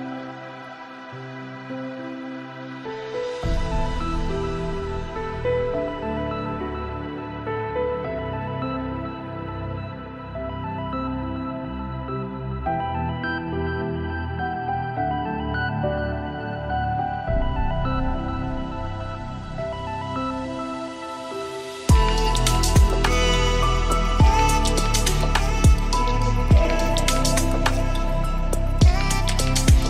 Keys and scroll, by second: 7.7 ctrl+z, 17.7 ctrl+space, 26.5 ctrl+space.